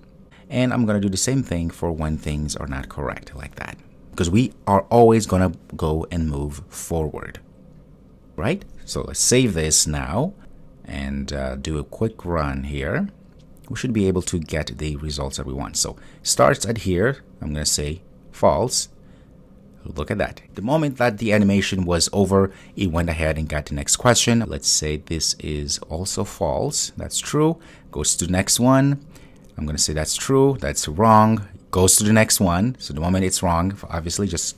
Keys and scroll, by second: 2.9 super+v, 9.4 super+s.